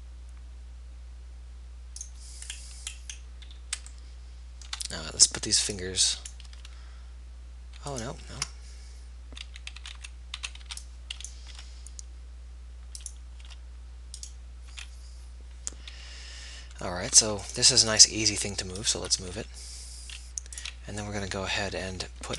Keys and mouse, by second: 6.8 b, 8.6 ctrl+z, 10.0 a, 10.2 a, 10.6 a, 11.8 b, 11.8 g, 13.8 g, 15.0 a, 20.2 g, 22.2 a.